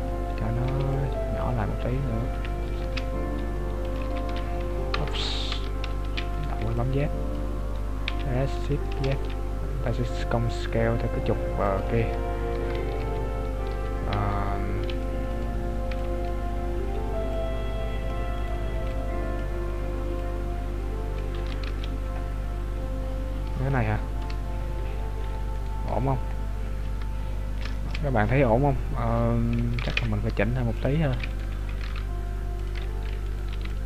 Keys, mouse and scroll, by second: 4.0 ctrl+click, 4.2 ctrl+z, 5.1 Tab, 5.8 z, 6.3 right click, 6.6 b, 8.1 s, 14.2 Tab, 15.0 right click, 16.0 b, 17.3 click, 18.5 right click, 18.8 b, 20.2 click, 21.5 Tab, 21.7 z, 22.3-23.8 scroll down 11, 23.8 shift+middle click, 24.4-25.2 scroll up 1, 25.6 right click, 25.6-26.4 scroll up 6, 27.1 Tab, 27.1-27.7 scroll up 3, 27.7 shift+middle click, 29.9 ctrl+Tab, 31.4 right click, 31.9 ctrl+Tab, 33.4 right click, 33.5 b.